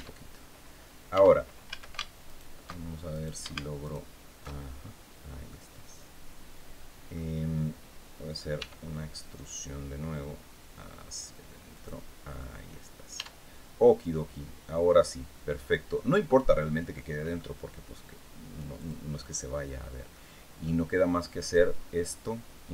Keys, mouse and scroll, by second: 0.1 scroll up 2, 0.8 Tab, 1.4 a, 1.9 alt+shift+right click, 2.8 alt+shift+right click, 3.5 alt+shift+right click, 4.6 scroll down 1, 5.2-7.0 middle drag, 8.2 e, 11.4 click, 12.8 Tab, 13.2 scroll down 1, 13.5 middle click, 13.6-16.1 drag, 16.6 click, 18.5 click, 19.6 scroll down 1, 19.8 middle click, 21.1 right click.